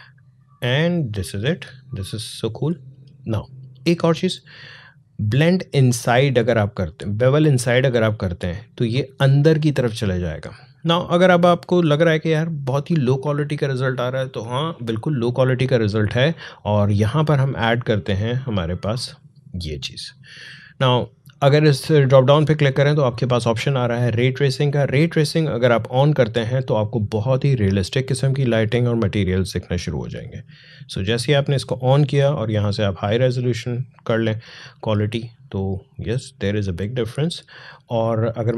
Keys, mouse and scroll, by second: 6.7-14.5 drag, 16.6-19.7 drag, 29.1 click, 34.7 click, 35.6 alt+click, 35.8-36.4 alt+scroll up 1.